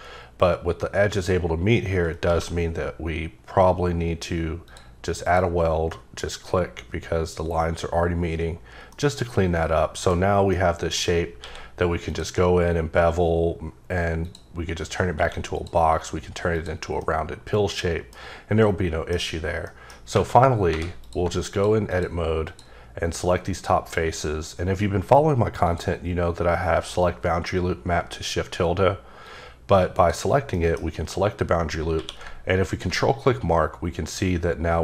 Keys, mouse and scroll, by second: 2.2 q, 4.6 click, 5.2 click, 5.9 middle click, 8.6-8.9 scroll down 3, 8.9 middle click, 10.1 scroll up 2, 10.5 middle click, 11.1 scroll down 2, 11.4 q, 12.0 click, 14.2 click, 15.1 q, 15.5 click, 16.5 click, 17.0 middle click, 18.6 middle click, 19.2-19.6 scroll up 2, 19.6 middle click, 20.4-20.7 scroll down 1, 20.7 3, 21.0 click, 21.9 shift+double click, 22.4 shift+click, 25.7 click, 29.2 click, 30.5 middle click, 31.6 scroll up 2, 32.0 q, 32.6 ctrl+click.